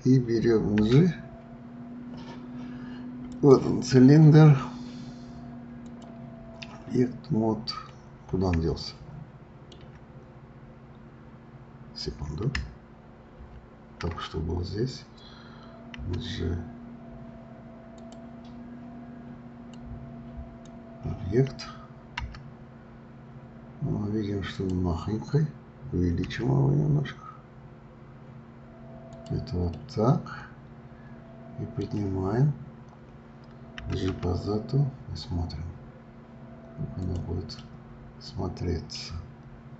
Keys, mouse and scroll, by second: 0.7 g, 3.3 click, 3.3 right click, 5.8-7.5 drag, 7.5-7.8 scroll up 2, 8.8-10.1 shift+middle drag, 10.1-10.9 scroll up 2, 10.9-11.3 scroll down 1, 13.4 ctrl+z, 15.9 g, 17.9 click, 19.7-22.2 drag, 22.2 g, 29.7-32.7 middle drag, 37.5-39.0 middle drag, 39.0-39.7 scroll down 2.